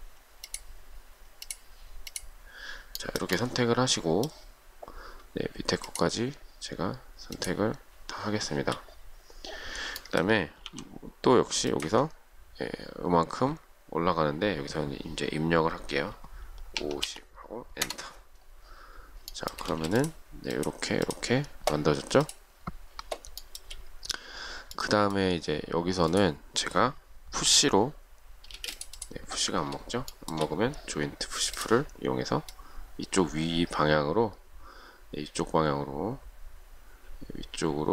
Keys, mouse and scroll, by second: 1.5 shift+click, 2.3 shift+click, 3.2 shift+middle click, 5.9 shift+click, 7.6 shift+click, 10.9 m, 12.1 ctrl+click, 16.8 typing, 17.8 Return, 19.6 shift+middle click, 19.8 shift+scroll up 1, 19.9 space, 23.6 shift+middle click, 27.7 p, 28.8 space, 30.0-30.4 shift+scroll down 1, 30.4 shift+middle click.